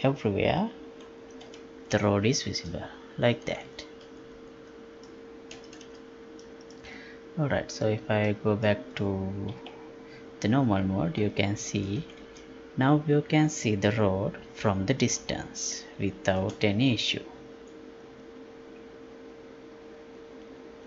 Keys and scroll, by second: 9.6 F11.